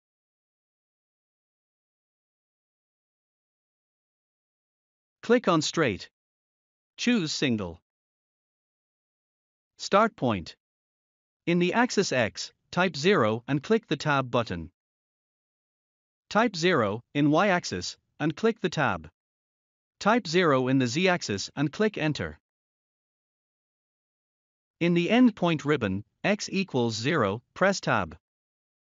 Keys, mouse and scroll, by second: 2.0 scroll down 1, 4.0 click, 9.3 0, 11.9 Tab, 13.9 0, 16.4 Tab, 17.2 typing, 21.1 Return, 25.4 0, 27.7 Tab.